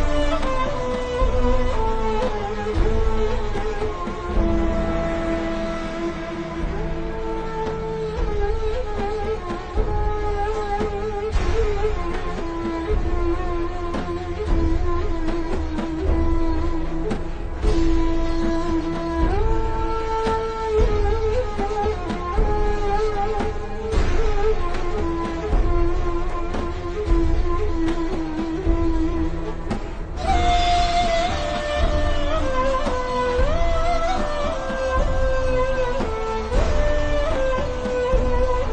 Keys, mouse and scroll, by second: 2.6 click, 3.1 shift+click, 3.9 right click, 10.4-10.8 scroll down 1, 10.8 click, 14.3 alt+shift+scroll down 1, 15.2 alt+shift+scroll up 1, 15.9 click, 18.8 alt+scroll up 2, 19.0 a, 19.3 click, 22.3 click, 23.2 alt+shift+scroll down 1, 24.4 click, 36.3 v, 36.9 click, 37.4 a, 37.7 click.